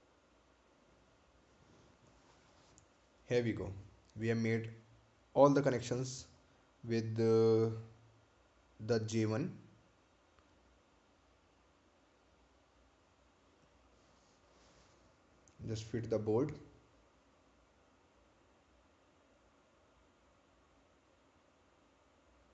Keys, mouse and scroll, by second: 0.0 click, 2.8 click, 6.5 right click, 11.5 right click, 11.7 ctrl+click.